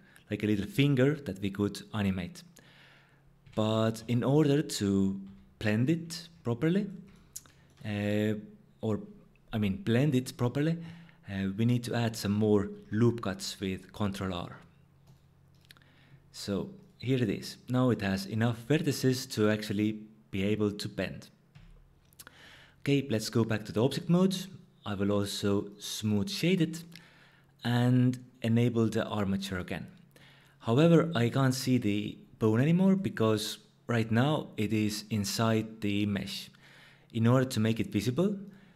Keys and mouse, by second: 3.4 g, 4.0 x, 5.2 z, 5.8 click, 6.9 click, 12.7 ctrl+r, 15.1 click, 21.5 Tab, 24.4-25.8 drag, 28.8 click, 30.2-32.9 drag, 38.4 click.